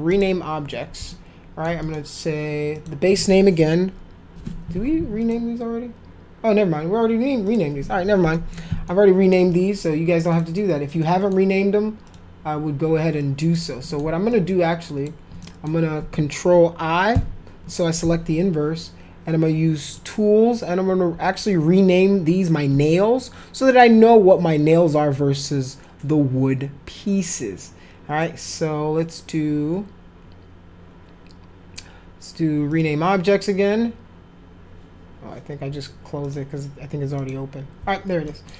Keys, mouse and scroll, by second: 0.1 click, 1.1 alt+middle click, 1.8 middle click, 2.7 click, 5.2 click, 7.5 click, 8.3 middle click, 8.9 alt+middle click, 10.3 click, 11.0 middle click, 12.0 click, 13.2 click, 13.8 middle click, 14.3 ctrl+click, 15.4 middle click, 17.1 ctrl+i, 19.9 click, 32.7 click, 36.2 click, 37.2 click, 38.2 middle click.